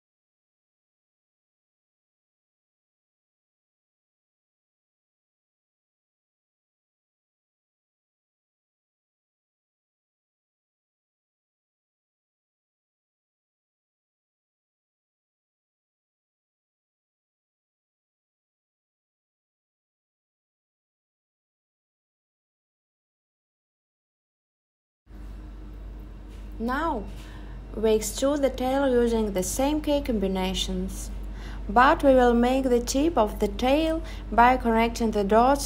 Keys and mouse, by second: 5.2 click, 5.2 right click, 9.8 click, 10.4 click, 11.9 click, 13.3 click, 13.3 right click, 16.1 click, 16.9 click, 20.0 x, 21.7 click, 26.3 e, 27.7 click, 28.1 super+z, 28.6 super+z, 30.6 s, 32.0 click, 32.8 click, 34.6 click.